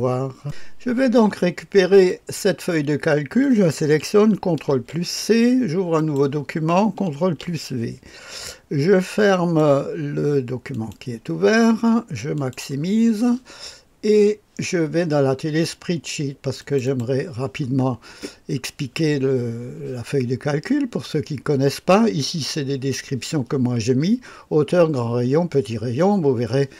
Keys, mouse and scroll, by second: 0.4 click, 2.0 click, 4.7 ctrl+c, 5.9 click, 7.2 ctrl+v, 9.3 click, 10.7 click, 12.3 click, 16.5 click, 16.8-26.7 drag.